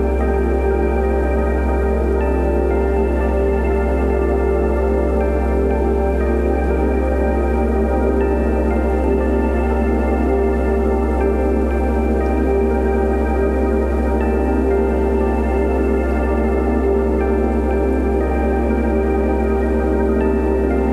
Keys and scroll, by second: 0.3 [, 1.0 5, 1.6 [, 3.4 ], 3.9 [, 5.4-6.9 typing, 9.5-11.2 typing, 12.6 ], 13.0 [, 14.5 space, 15.3 v, 16.3 space, 19.2 shift+super+g.